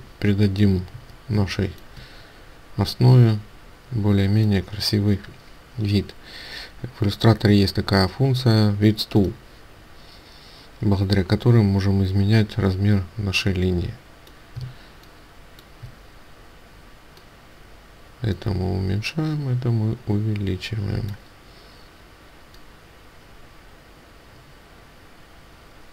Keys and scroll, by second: 14.7 ctrl+space.